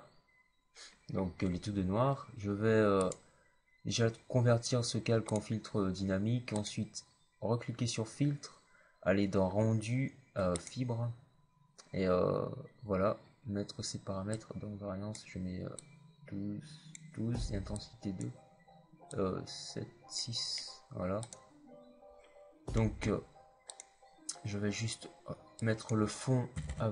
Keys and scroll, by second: 26.4 alt+BackSpace, 26.6 KP_2, 26.6 KP_5.